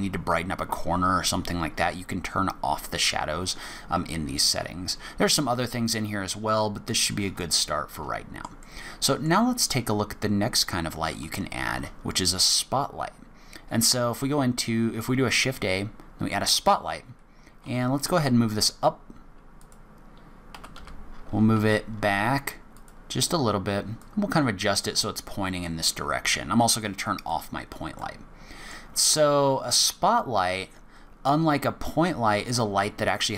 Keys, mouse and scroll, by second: 7.4 shift+middle click, 8.6 middle click, 11.6 shift+a, 17.6 g, 20.5 g, 23.9 click, 27.1 click, 28.0 middle click, 29.8 click.